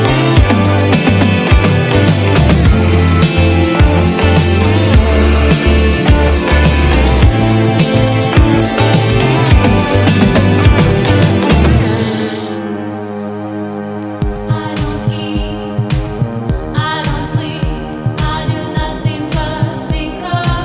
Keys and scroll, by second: 0.0 space, 1.3 ctrl+z, 1.6 space, 9.5 space, 14.0 ctrl+z, 14.4 ctrl+z, 15.7 space.